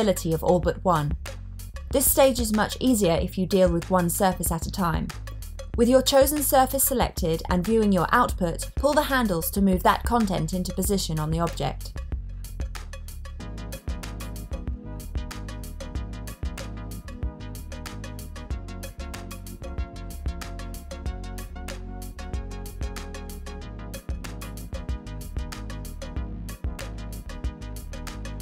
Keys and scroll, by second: 18.9 super+z, 19.1 super+z.